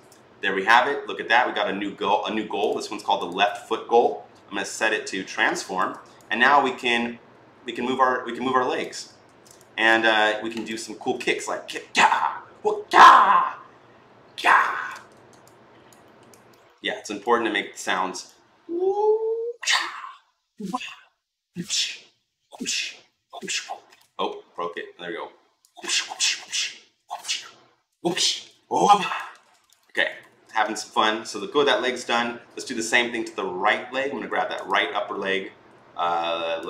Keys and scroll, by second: 4.6 e, 9.0 ctrl+z, 24.3 ctrl+z, 29.2 ctrl+z, 30.1 ctrl+z.